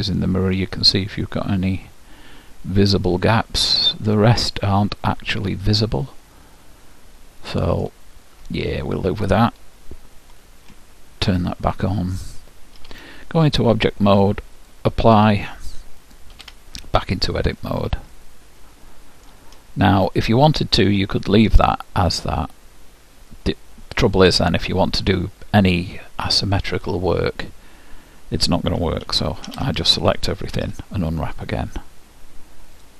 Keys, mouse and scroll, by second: 8.1-11.1 middle drag, 11.9-13.5 drag, 12.8 Tab, 14.6-16.4 drag, 16.3 Tab, 17.5-20.1 middle drag, 21.1-22.9 drag, 23.3-25.1 drag, 26.3-28.3 middle drag, 29.1 a, 29.5 a, 30.7 u.